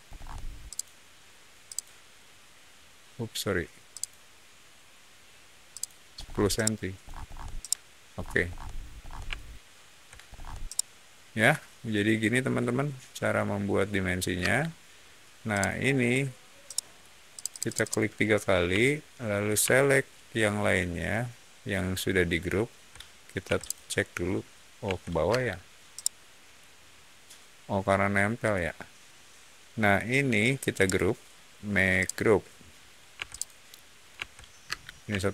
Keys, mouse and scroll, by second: 0.0 middle click, 0.6 click, 1.6 click, 3.8 click, 5.6 click, 6.1 scroll down 1, 6.4 middle click, 7.0 scroll up 1, 7.1 scroll down 1, 7.5 middle click, 8.2-9.1 scroll down 2, 9.2 shift+middle click, 10.2 scroll down 1, 10.5-14.2 shift+middle drag, 14.3 space, 15.4 click, 16.6 middle click, 17.3 click, 17.4 click, 17.6 click, 17.7 click, 20.1-21.5 ctrl+drag, 23.4 m, 23.5 click, 24.8 Escape, 25.2 space, 25.8 middle click, 30.7 right click, 31.9 click, 33.1 m, 33.2 click, 34.1 Escape, 34.6 space.